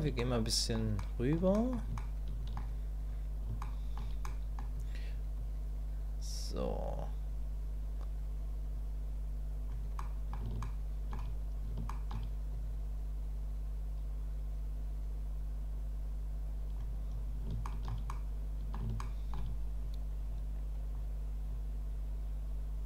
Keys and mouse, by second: 0.2 click, 1.0 shift+click, 1.5 click, 2.0 shift+click, 3.6 shift+middle click, 4.3 middle click, 5.4-9.7 drag, 10.0 middle click, 10.6 shift+middle click, 11.9 shift+middle click, 12.5-16.7 middle drag, 17.7 shift+middle click, 18.1 middle click, 19.0 shift+click, 19.8-20.9 drag, 21.5-22.8 drag.